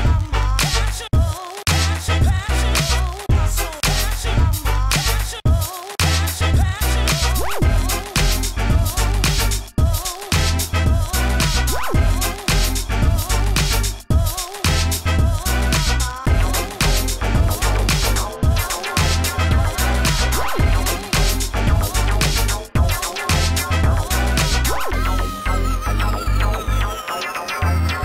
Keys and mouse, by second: 0.3 Tab, 2.1 ctrl+e, 2.4 Tab, 3.5 Tab, 7.5 KP_1, 7.8 Tab, 8.5 click, 8.6 g, 9.2 g, 9.8 click, 9.8 g, 9.8 middle click, 10.2 Tab, 10.2-11.4 drag, 11.2 a, 11.8 alt+z, 12.4 alt+z, 12.7 ctrl+s, 14.6 Tab, 15.3 Tab, 15.5 h, 16.0 Tab, 17.4 alt+h, 18.4 g, 18.7 Tab, 19.0 a, 19.2 ctrl+f, 19.7 Tab, 21.5 Tab, 26.6 Tab, 27.0 Tab, 27.5 g.